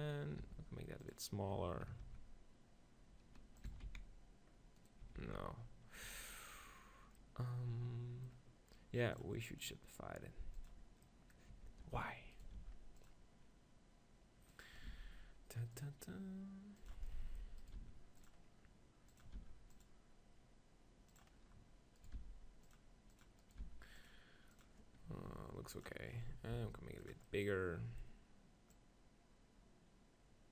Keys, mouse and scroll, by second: 0.4 s, 0.6-2.8 drag, 1.1 right click, 2.1 ctrl+b, 3.8 s, 4.9 click, 5.2 ctrl+z, 6.1 Tab, 9.9-11.6 drag, 11.6 Tab, 12.6 ctrl+r, 15.0 ctrl+r, 15.6-16.8 drag, 16.9-18.8 drag, 17.6-20.6 right drag, 17.8 ctrl+r, 19.2-20.6 drag, 19.4 ctrl+r, 22.2 ctrl+r, 23.2-27.3 drag, 23.2-25.2 right drag, 23.7 ctrl+r, 25.2 Tab, 26.6 s, 30.1 click.